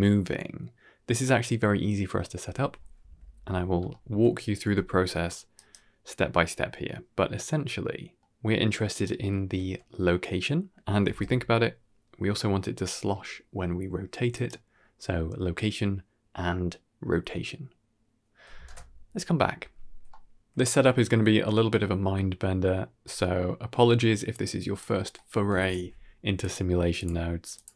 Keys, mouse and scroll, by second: 2.9 KP_1, 3.8 shift+middle drag, 4.5 g, 6.4-7.3 middle drag, 8.1-8.5 middle drag, 8.9 g, 10.9 r, 15.4 ctrl+space, 16.6 scroll down 2, 16.8-17.4 middle drag, 17.6 click, 18.7 click, 19.1 g, 23.1 middle drag, 24.3 click, 25.0 middle click, 25.4 shift+a.